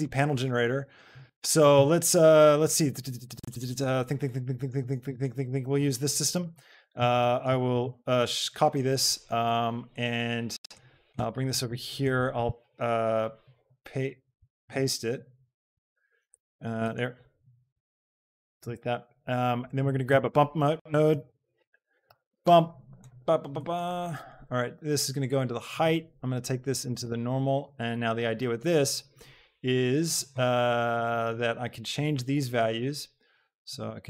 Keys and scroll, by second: 7.7 ctrl+c, 13.7 v, 14.4 ctrl+v, 16.3 g, 18.5 x, 21.0 u, 21.0 shift+a, 21.4 m, 21.8 p, 22.1 Return.